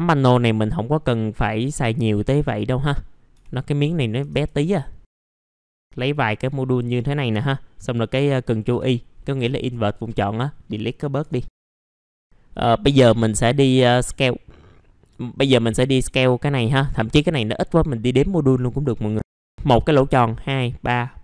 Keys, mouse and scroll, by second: 0.6-1.9 drag, 1.9 middle click, 2.2-4.6 drag, 3.3 Delete, 4.4-5.4 typing, 5.0-5.4 scroll up 1, 5.6 click, 8.7 ctrl+Delete, 9.1 scroll down 1, 9.9 middle click, 10.0 scroll down 1, 10.7-11.2 scroll up 1, 11.2 F11, 11.7 click, 12.0 scroll up 1, 12.2 middle click, 13.9-15.2 drag, 15.3-16.3 scroll up 1, 16.3 middle click.